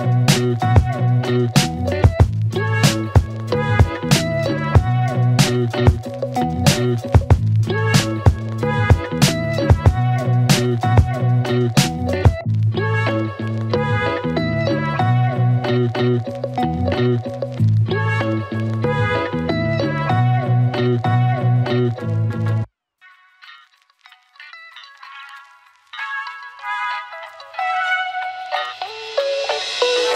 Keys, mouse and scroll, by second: 0.4 Return, 6.6 space, 9.7 click, 13.2 ctrl+c, 16.2 click, 18.8 ctrl+v, 20.6-24.2 click, 24.8 space, 28.9 space.